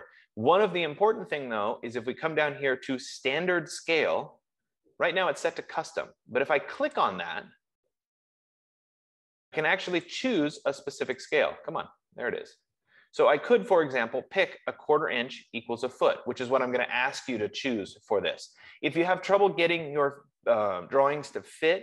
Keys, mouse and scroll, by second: 7.6-10.4 drag, 11.7 click.